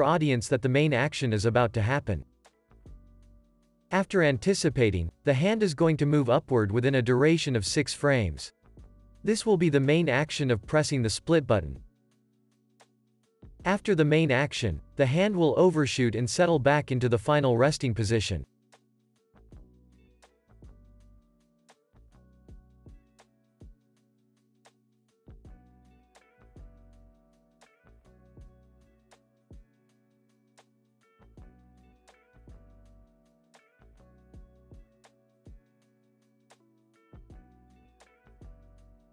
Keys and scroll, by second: 0.3 alt+x, 2.2 alt+q, 2.8 alt+x, 11.1 z, 11.6 x, 12.4 alt+x, 17.2 alt+x, 22.0 F9, 22.7 v, 23.2 super+s, 33.0 super+s, 33.6 space, 35.3 space, 35.5 super+s, 36.7 space, 39.0 super+s.